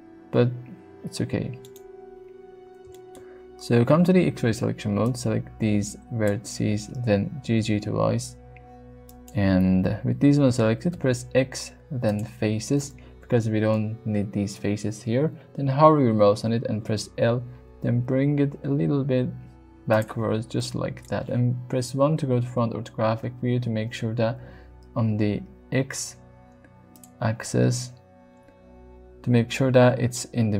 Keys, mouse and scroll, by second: 0.1 s, 1.6 right click, 2.9 shift+middle click, 3.9 alt+z, 5.1-6.3 drag, 7.3 g, 7.5 g, 9.1 click, 10.9 x, 16.4 l, 17.5 g, 19.9 click, 20.6-21.1 middle drag, 21.7 KP_1, 23.2 alt+z, 24.3 g, 26.9 click.